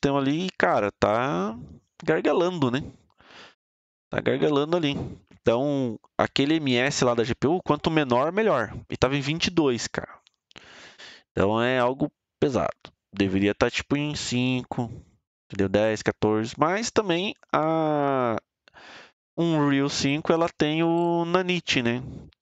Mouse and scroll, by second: 12.3 click.